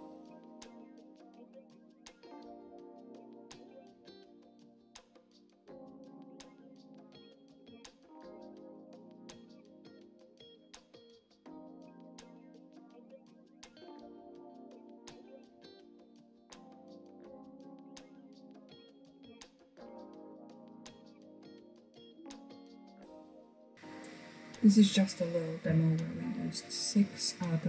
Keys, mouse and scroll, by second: 0.4 middle click, 1.3 s, 2.2 KP_1, 2.6 g, 3.7 click, 3.8-4.4 scroll down 4, 3.9 Tab, 4.0 middle click, 4.4 middle click, 4.5 scroll up 1, 4.7-5.0 shift+middle drag, 5.0 s, 5.5 middle click, 5.8 g, 6.2 click, 6.3 scroll down 6, 6.4 shift+middle click, 7.1 scroll up 3, 7.2 shift+middle click, 7.4 scroll down 4, 7.5 shift+middle click, 7.9 scroll up 1, 8.0-8.7 shift+middle drag, 8.9 click, 9.7 shift+middle click, 9.9 click, 10.1 click, 10.9 middle click, 11.4 click, 11.6 scroll down 1, 11.7 middle click, 11.8 scroll up 5, 12.5 Tab, 12.8 i, 13.2 Tab, 13.3 click, 13.3 scroll down 2, 13.4 middle click, 13.5 click, 13.6 scroll up 1, 13.7-14.3 middle drag, 14.3-14.8 scroll down 3, 14.4 shift+middle click, 14.6 click, 14.8-15.3 shift+middle drag, 15.3 scroll up 3, 15.4 middle click, 16.2 click, 16.7 Tab, 17.0 click, 19.1 click, 21.5 Tab, 21.7 scroll down 2, 21.8-23.7 middle drag, 23.7 click.